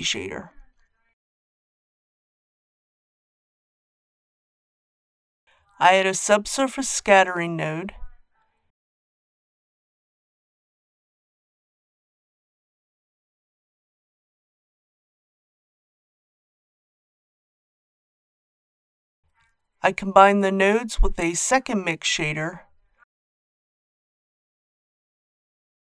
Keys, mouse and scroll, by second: 6.3 shift+a, 9.7-18.6 drag, 20.2 shift+d, 21.4-25.6 drag.